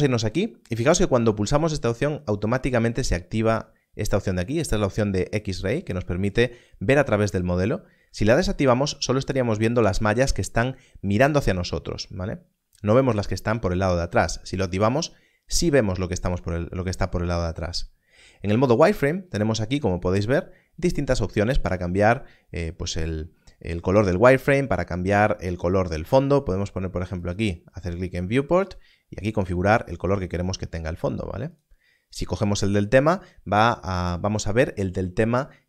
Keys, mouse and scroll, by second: 5.6 click, 7.5-7.9 scroll up 1, 18.7 click, 27.2 click.